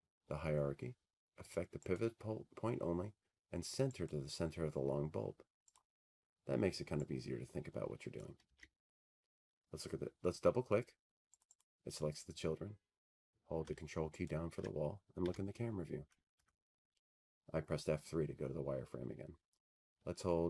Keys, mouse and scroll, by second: 2.6-4.6 drag, 7.6 click, 11.4 click, 13.8 click, 14.0 ctrl+click, 14.1 ctrl+z, 17.1 click, 17.3 click, 19.9 ctrl+click.